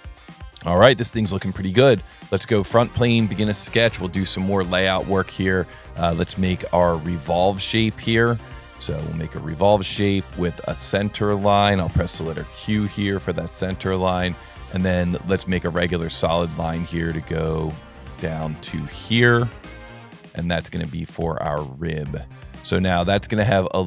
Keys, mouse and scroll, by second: 2.5 click, 2.8 s, 3.5 click, 5.2 s, 6.3 click, 7.6 click, 8.9 click, 9.6 s, 10.1 click, 11.1-13.1 drag, 12.1 q, 14.2 s, 14.9 click, 15.8 s, 16.5 click, 17.7 click, 19.6 q, 22.5 click, 23.3 click.